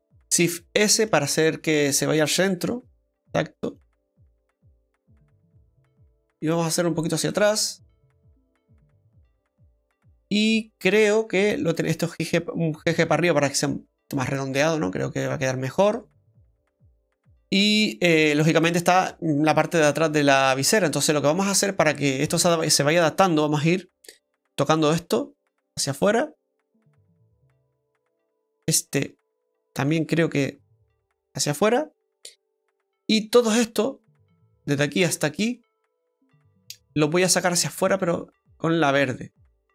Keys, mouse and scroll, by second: 0.4 shift+s, 1.5 s, 4.1 middle click, 6.5 click, 7.3 middle click, 11.7 right click, 12.9 g, 14.5 middle click, 22.6 middle click, 23.9 right click, 24.4 shift+right click, 24.8 middle click, 25.9 click, 28.2 right click, 29.0 shift+right click, 29.9 click, 32.6 middle click, 33.6 right click, 34.6 shift+right click, 35.6 ctrl+shift+right click, 37.8 click.